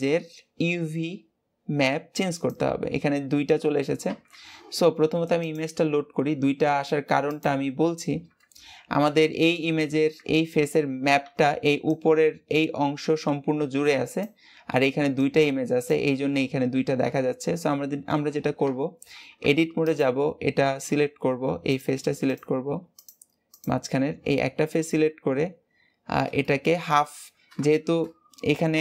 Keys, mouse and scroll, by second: 5.3 click, 7.7 scroll down 2, 8.0-8.6 scroll up 2, 8.6-9.4 scroll down 2, 9.4-11.0 scroll down 2, 17.7 Tab, 19.1 Tab, 19.8 click, 21.6 click, 22.1 click, 22.9 click, 23.4 click, 25.7-26.3 scroll up 1, 26.3-28.8 shift+middle drag.